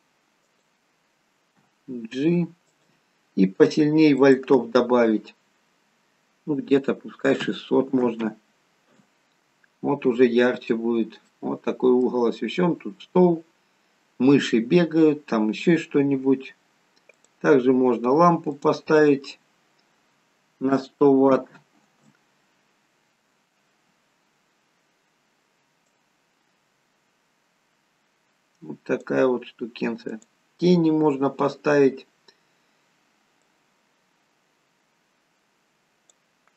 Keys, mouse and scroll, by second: 1.5 g, 2.6 g, 4.2 click, 8.1 0, 10.6-11.1 scroll up 5, 11.3 middle click, 12.2-13.7 scroll down 2, 14.8-16.0 scroll down 2, 16.0-16.8 scroll up 2, 17.1 click, 18.8 click, 22.0 0, 25.9 click, 30.0 click.